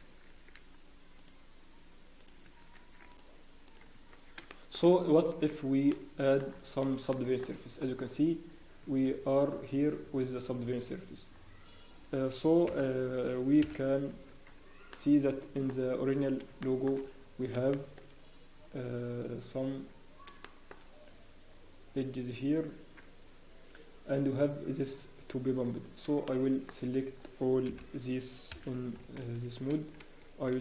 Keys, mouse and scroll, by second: 0.2 ctrl+r, 3.9 ctrl+r, 3.9 Tab, 4.0-4.4 scroll down 1, 4.5 shift+middle click, 5.8 ctrl+2, 5.8-6.4 scroll down 3, 6.4 middle click, 6.4 scroll up 1, 7.1 shift+middle click, 8.0 scroll down 1, 9.1 Tab, 9.2-9.5 scroll down 1, 9.9 Tab, 10.6 scroll down 1, 10.9 Tab, 10.9-11.4 scroll down 1, 11.4 scroll down 1, 12.6 KP_1, 13.6 KP_3, 14.0 scroll down 2, 14.5 Tab, 14.9 middle click, 15.8-16.2 scroll down 4, 16.6 shift+middle click, 16.6-17.2 scroll up 4, 17.3 scroll down 1, 17.7 shift+middle click, 18.0 scroll down 3, 18.2 scroll up 1, 19.9 Tab, 19.9 shift+scroll up 2, 20.4 shift+middle click, 20.7-21.1 scroll up 1, 25.2-25.6 scroll down 1, 25.6 scroll up 1, 26.2 shift+middle click, 26.7 scroll down 1, 29.2 KP_1, 29.4 KP_3, 29.4 shift+z, 30.0 a, 30.5 alt+a.